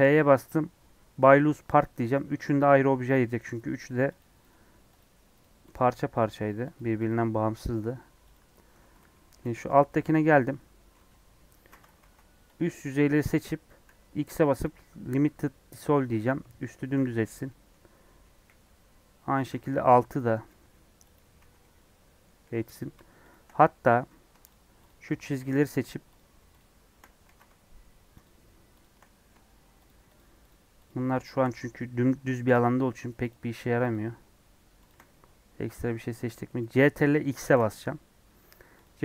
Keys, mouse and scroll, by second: 1.7 p, 2.2 Tab, 2.5 scroll up 3, 3.3 click, 3.7 click, 4.1 click, 4.9 right click, 5.3 click, 5.7 click, 6.7 right click, 7.0 click, 8.3 right click, 9.2 /, 9.6 Tab, 9.8-11.0 middle drag, 11.0 KP_3, 12.0 alt+z, 13.1 click, 15.7 x, 16.1 middle click, 16.6 scroll down 3, 16.9 alt+z, 17.4 middle click, 18.3 KP_1, 19.5 alt+z, 20.4 click, 21.1 x, 21.3 alt+z, 21.5 middle click, 22.4 2, 22.7 Left, 24.0 w, 24.4 shift+Left, 24.8 shift+Left, 25.1 shift+Left, 25.4 middle click, 26.1 shift+Left, 26.5 shift+Left, 27.2 ctrl+z, 28.2 shift+Left, 28.7 shift+Left, 28.9 middle click, 29.8 shift+Left, 30.1 shift+Left, 30.4 shift+Left, 30.8 shift+Left, 31.1 shift+Left, 32.5 middle click, 33.2 shift+Left, 33.8 shift+Left, 35.0-36.3 middle drag, 36.3 scroll up 1, 36.4 middle click, 37.3 ctrl+x, 37.7-38.7 middle drag, 38.7 click.